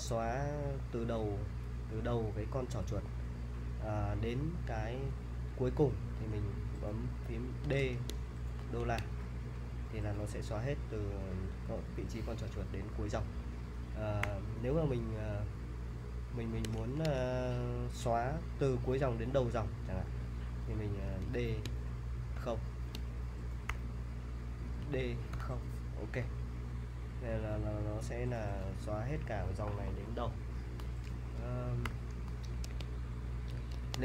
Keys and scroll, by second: 7.6 d, 8.6 shift+4, 14.2 u, 16.8 shift+4, 21.3 d, 22.3 shift+0, 23.7 u, 24.8 d, 25.3 0, 31.8 u, 32.6 super+Tab, 33.7 super+Tab.